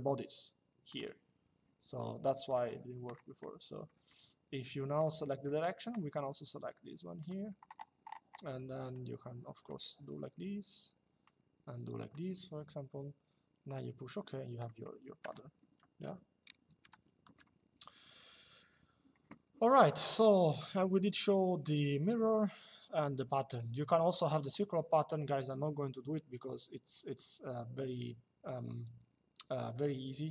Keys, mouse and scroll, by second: 0.6 click, 2.2 click, 3.6 middle click, 4.7 click, 6.9 click, 8.6 click, 10.9 click, 13.4 click, 14.4 middle click, 19.8 click.